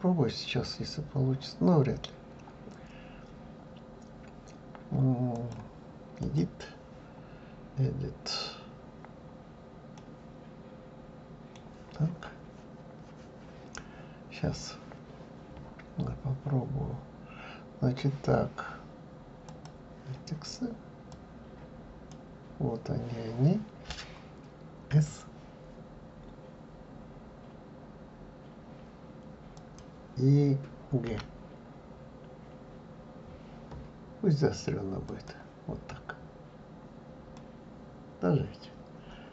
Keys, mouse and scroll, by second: 1.4-2.4 scroll down 1, 2.4-2.8 scroll down 1, 5.3-7.8 drag, 7.8-8.6 scroll up 2, 8.6-9.1 scroll down 2, 9.3-9.9 scroll up 2, 10.0-13.0 middle drag, 13.5-16.3 scroll up 1, 19.5 click, 21.1 click, 31.1 g, 36.2-37.4 scroll down 4, 37.4-39.3 middle drag.